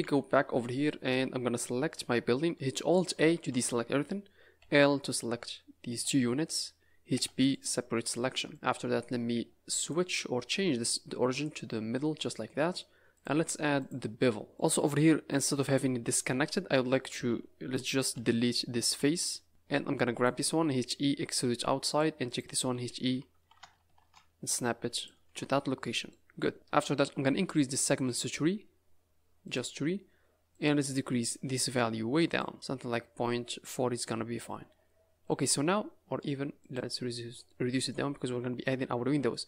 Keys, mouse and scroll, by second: 0.3-0.7 scroll down 5, 0.7 middle click, 1.0 Tab, 3.3 alt+a, 4.6 l, 5.9 l, 7.1 p, 8.3 Tab, 8.5 click, 8.5 scroll down 4, 8.7 scroll up 3, 9.8 click, 11.9 scroll up 4, 13.1 click, 13.7 click, 14.5 middle click, 15.2 scroll down 5, 15.5-15.9 scroll up 4, 16.2 Tab, 17.0 a, 17.2 a, 18.1 l, 18.9 x, 19.5 middle click, 20.1 click, 20.8 e, 22.2 click, 22.7 e, 25.3 Tab, 25.5 middle click, 26.3 scroll down 4, 26.5 scroll up 4, 27.8 click, 28.0 click, 28.2 click, 29.4 click, 30.5 click, 31.2 click, 31.4-32.5 click, 32.2 click, 33.5 scroll down 3, 33.7 scroll up 5, 34.0 middle click, 34.7 scroll down 2, 36.7 click, 37.4 middle click, 38.3 Tab, 39.3 middle click.